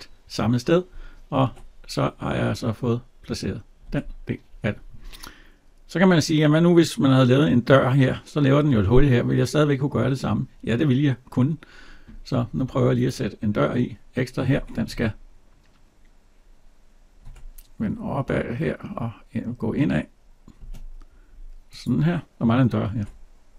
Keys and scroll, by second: 1.2 alt+Tab, 14.7 alt+Tab, 22.8 alt+Tab.